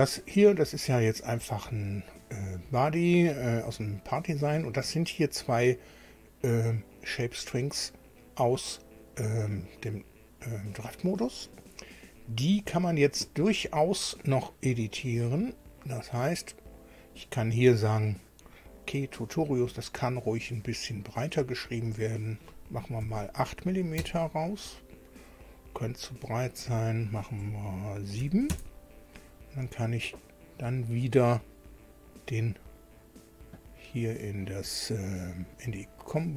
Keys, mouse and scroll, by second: 7.1 click, 8.1 click, 9.9 click, 12.1 click, 15.5-17.1 drag, 21.7 click, 23.0 KP_8, 24.0 KP_Enter, 26.5 click, 28.2 KP_7, 28.5 KP_Enter, 32.5 click, 35.6 click.